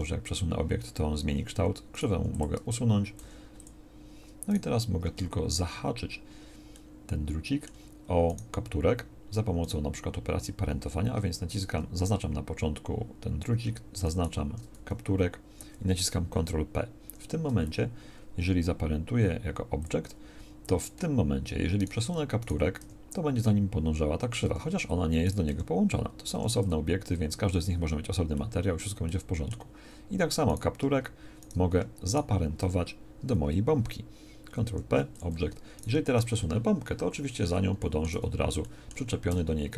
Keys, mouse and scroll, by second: 2.2 x, 3.2 x, 14.7 z, 17.0 ctrl+p, 22.8 g, 25.5 g, 34.7 ctrl+p, 36.4 g, 38.1 z, 39.3 g.